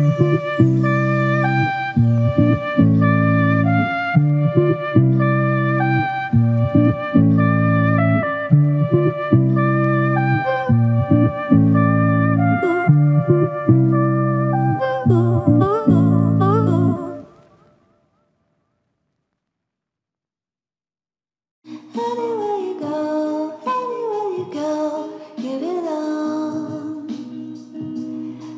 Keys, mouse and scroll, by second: 0.8 alt+shift+click, 2.4 alt+click, 7.0 ctrl+click, 8.3 ctrl+click, 12.2 ctrl+click, 17.9 ctrl+alt+click, 19.3 alt+shift+click, 21.5 r.